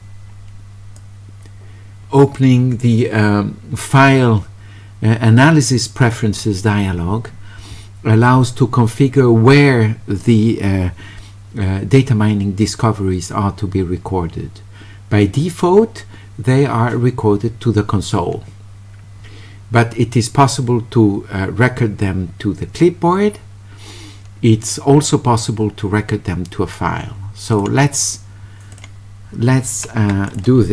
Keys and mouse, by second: 1.0-2.4 drag, 27.5 click, 28.8 click, 30.3 click.